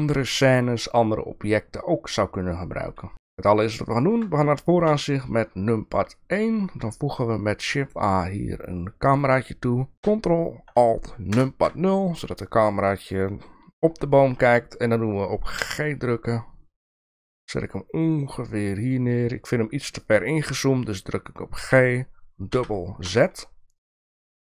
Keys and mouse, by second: 4.9 KP_1, 6.7 shift+a, 11.3 ctrl+alt+KP_0, 12.4 shift+middle drag, 15.6 g, 21.6 g.